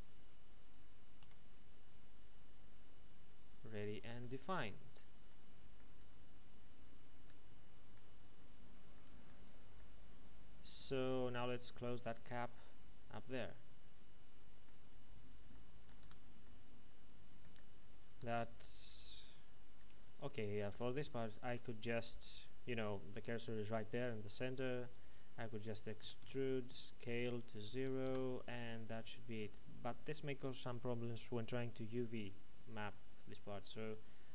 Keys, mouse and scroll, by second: 0.1 click, 1.2 e, 3.6 click, 3.8 Tab, 4.2 middle click, 5.8 Tab, 6.4-7.2 scroll up 1, 7.2 middle click, 8.1-8.9 scroll down 1, 8.9 middle click, 9.3 Tab, 9.7 middle click, 14.9-15.4 scroll up 1, 15.8 shift+middle click, 16.0 Tab, 16.4 middle click, 18.3 ctrl+Tab, 18.7 click, 20.1 alt+shift+right click, 20.7 a, 21.0 alt+shift+right click, 26.0 typing, 28.0 KP_Enter.